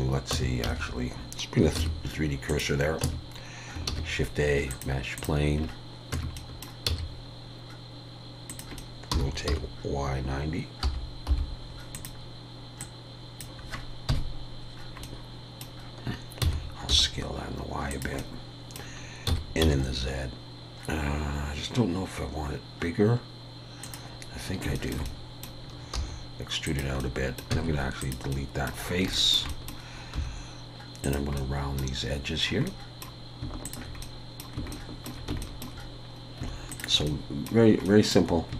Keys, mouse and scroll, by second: 0.3 Tab, 0.7 a, 1.8 shift+s, 3.0 Tab, 3.9 shift+a, 5.6 scroll down 1, 6.1 Tab, 6.1 scroll down 2, 6.4 middle click, 6.9 s, 8.8 middle click, 9.0 scroll up 1, 9.1 r, 12.8 click, 14.1 KP_1, 14.8 scroll up 1, 15.0 middle click, 16.4 s, 18.2 middle click, 19.3 s, 24.7 shift+middle click, 25.1 middle click, 25.9 e, 27.0 middle click, 27.5 x, 28.3 middle click, 28.9 scroll up 2, 29.1 shift+middle click, 29.5 middle click, 30.1 2, 31.0 click, 31.4 middle click, 32.4 scroll up 3, 32.7 middle click, 33.6 shift+click, 34.0 middle click, 34.7 shift+middle click, 36.1-36.4 scroll up 2, 37.1 middle click.